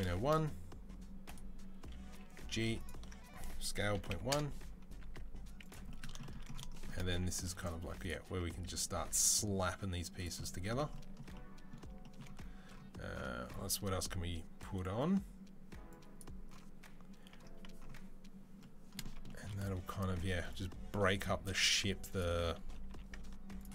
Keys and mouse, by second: 1.9 g, 3.4 s, 4.8 s, 6.9 g, 8.2 s, 8.8 g, 10.0-15.6 ctrl+middle drag, 15.6-18.6 drag, 21.1 middle click, 21.4 s, 21.5 click, 21.5 middle click, 21.8-23.6 drag, 22.6 g, 23.6-23.7 middle drag.